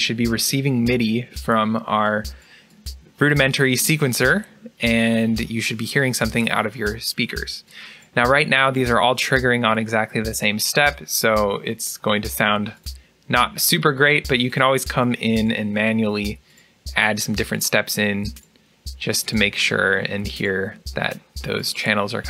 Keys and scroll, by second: 15.2 BackSpace.